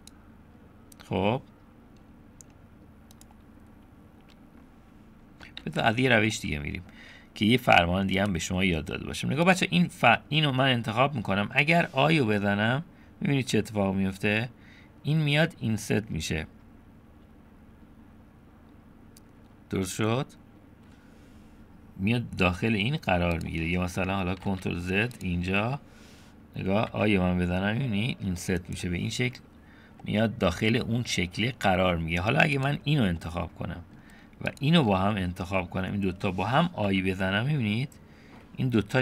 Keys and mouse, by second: 5.6 ctrl+z, 6.4 click, 8.3 click, 9.5 click, 10.4 click, 24.5 ctrl+z, 25.2 click, 26.9 i, 30.0-31.9 middle drag, 32.6 click, 33.2 middle click, 35.1 click.